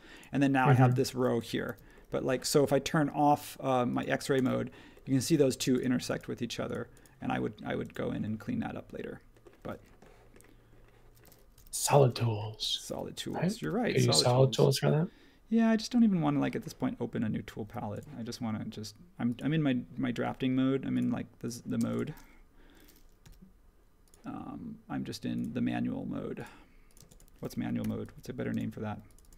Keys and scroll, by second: 1.6 super+g, 11.5 h, 13.3-14.1 typing, 21.8 space, 23.2 l, 27.0 space, 27.8 p, 28.5 space.